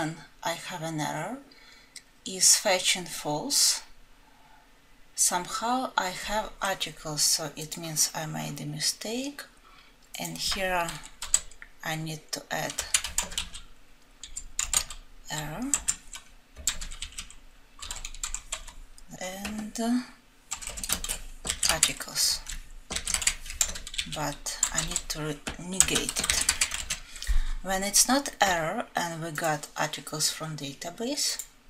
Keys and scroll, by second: 13.5 ctrl+;, 22.4 ctrl+alt+l, 23.6 ctrl+;, 26.9 ctrl+alt+l.